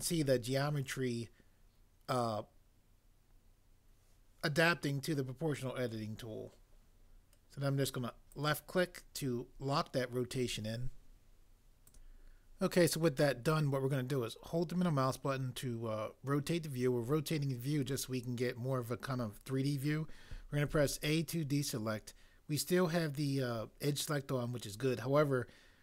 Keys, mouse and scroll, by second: 20.7 a.